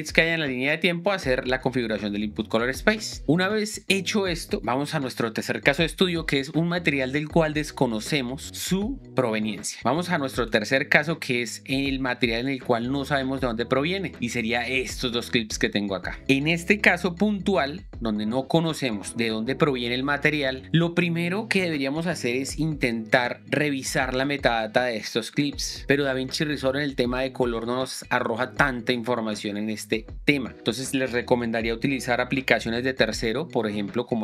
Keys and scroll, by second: 17.7 shift+6, 19.6 shift+6.